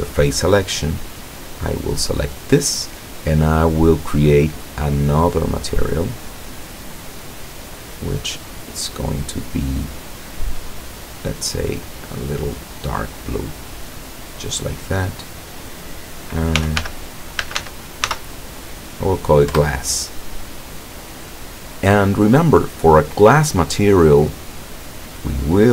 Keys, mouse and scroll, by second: 1.1 right click, 5.3 click, 6.8 click, 7.9 click, 10.2-13.6 drag, 15.4 click, 16.7 g, 16.9 l, 17.7 s, 19.7 Return, 24.0 click.